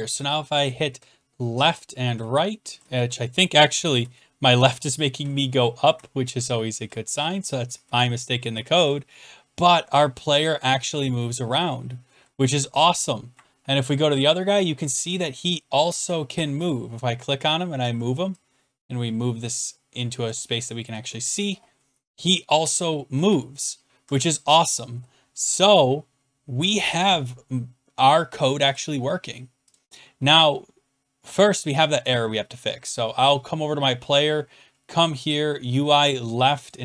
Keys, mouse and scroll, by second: 0.9-1.6 Right, 1.6 Left, 2.1-2.7 Down, 2.8 Left, 3.7 Left, 4.0 Left, 4.5-5.2 Right, 5.2 Down, 5.7 Down, 5.7 Down, 5.8 Down, 6.3 Down, 6.8 Left, 7.2 Down, 7.7 Down, 8.3 Right, 8.3 Left, 8.3 Down, 8.3 Up, 8.7-9.8 Down, 10.4 Up, 10.5 Up, 11.2-11.5 Down, 11.2 Up, 11.5 Right, 12.2 Down, 13.1 Up, 15.1 Down, 16.7 Up, 16.7 click, 17.0-17.9 Down, 17.8 Right, 20.2 click, 20.5 Down, 20.8 Right, 21.9-23.0 Down, 23.8 Up, 28.7 click, 29.7 click, 33.8 click, 33.8 scroll down 6, 36.7 click.